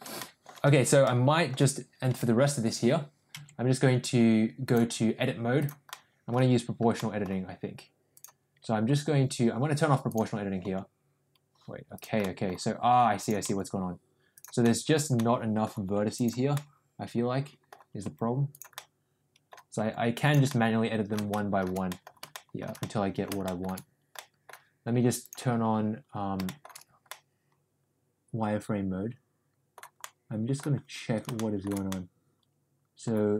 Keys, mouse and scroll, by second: 0.1 middle click, 0.6 Tab, 0.9 middle click, 2.0 Tab, 3.2 Tab, 4.6-5.6 drag, 5.8 middle click, 6.9 middle click, 10.0 click, 10.5 g, 12.3 middle click, 13.1 click, 13.4 g, 14.7 middle click, 15.2 middle click, 16.0 click, 16.5-17.6 middle drag, 17.9 g, 18.8 middle click, 19.8 g, 20.5 middle click, 21.3 middle click, 21.9 middle click, 22.2 middle click, 22.8 middle click, 23.4 shift+middle click, 24.0 middle click, 26.4 shift+middle click, 27.1-28.1 middle drag, 28.2-29.7 middle drag, 30.1 middle click, 31.3 shift+middle click, 31.8-33.0 middle drag.